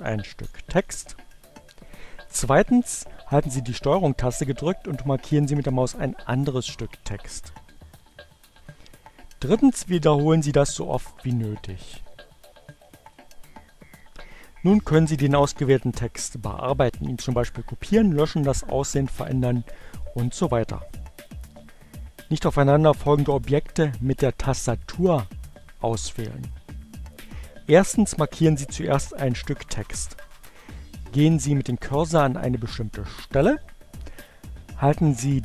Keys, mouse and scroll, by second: 0.8 click, 6.9 ctrl+click, 8.0 click, 11.6-13.0 ctrl+drag, 13.2 click, 24.5 click.